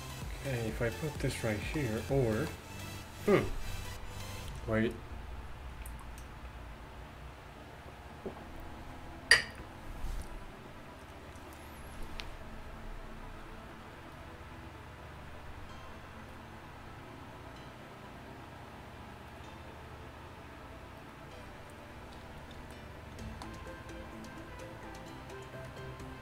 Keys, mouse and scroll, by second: 2.1 middle click, 22.8 middle click, 23.2-26.2 middle drag.